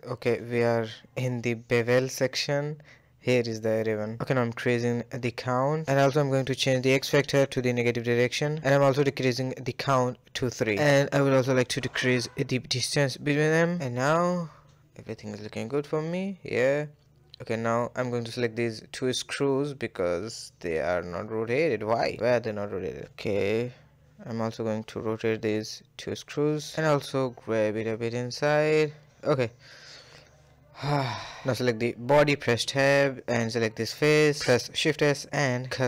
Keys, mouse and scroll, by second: 1.8-2.7 drag, 2.7-4.4 scroll down 6, 4.4-8.4 drag, 8.5-10.2 drag, 11.5-12.8 drag, 13.6 a, 13.7 a, 14.0-15.2 middle drag, 15.2-15.5 scroll down 3, 15.5-16.7 middle drag, 16.7-17.2 scroll down 4, 17.2-17.8 shift+middle drag, 19.1 KP_1, 19.4 scroll up 2, 19.6-19.9 shift+middle drag, 19.9-20.2 scroll up 1, 20.2-20.9 shift+middle drag, 20.9 r, 21.8 g, 22.5 r, 23.0-24.2 shift+middle drag, 24.2 scroll up 1, 24.4-25.1 shift+middle drag, 25.1 scroll down 1, 25.4 click, 26.1 KP_1, 26.5 r, 27.8 scroll down 2, 28.0-28.5 shift+middle drag, 28.5 a, 28.6 a, 28.8 shift+middle drag, 29.0 scroll down 1, 29.3-32.0 shift+middle drag, 32.0 click, 33.0 click, 33.9 shift+s, 35.6 Tab.